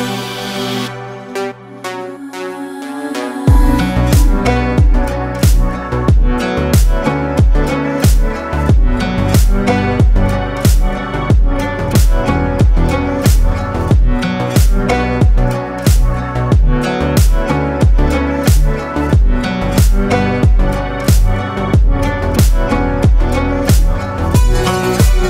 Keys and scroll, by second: 0.2 ctrl+space, 0.7 typing, 1.9 typing, 2.6 ctrl+space, 8.2 ctrl+alt+space, 11.3 ctrl+alt+space, 12.3 ctrl+alt+shift+space.